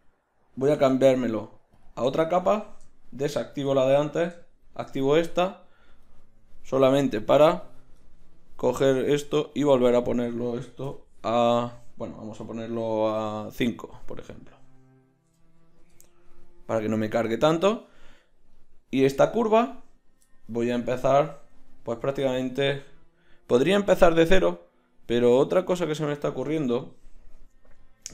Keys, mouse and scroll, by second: 0.7 m, 5.3-8.0 right drag, 8.0 middle click, 8.7-9.9 right drag, 9.9-18.5 middle drag, 18.5 right click, 19.1 Tab.